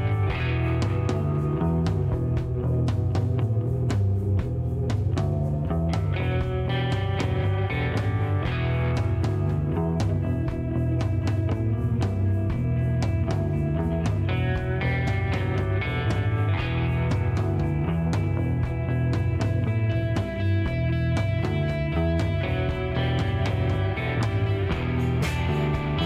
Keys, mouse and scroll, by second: 0.6 click, 4.1 click, 6.6-7.7 typing, 9.1 KP_0, 10.2 KP_Divide, 10.5 KP_4, 12.3 BackSpace, 13.1 KP_8, 15.4 click, 17.0-20.3 drag, 21.0 middle click, 22.0 scroll down 2, 22.2 middle click, 24.8-26.0 drag.